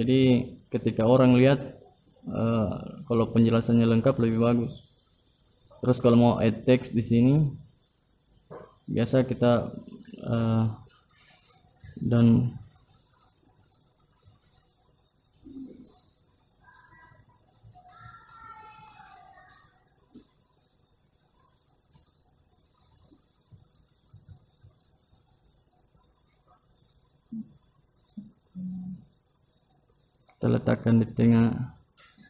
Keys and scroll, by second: 31.5 ctrl+a.